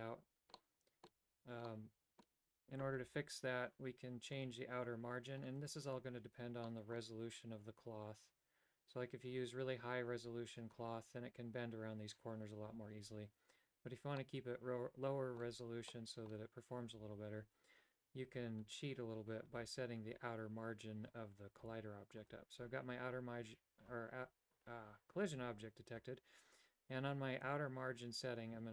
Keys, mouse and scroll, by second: 0.7 middle click, 1.8 middle click, 4.5-5.5 right drag, 6.8 middle click, 14.4-15.6 middle drag, 16.1 middle click, 21.9 a, 22.3 right click, 27.8-28.7 shift+drag.